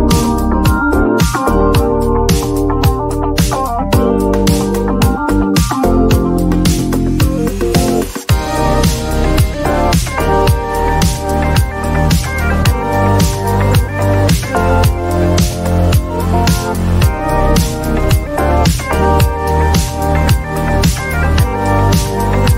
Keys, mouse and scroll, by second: 4.9-6.5 drag, 10.4 click, 12.9 click, 14.1 click, 15.8 click, 18.2 click, 22.4 click.